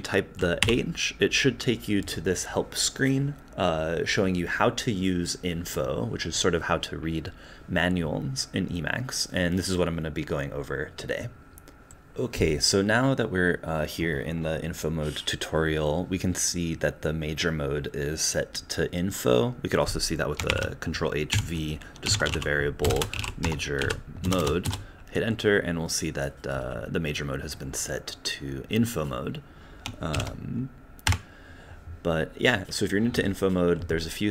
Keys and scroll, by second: 0.6 h, 21.8-24.4 typing, 24.7 Return.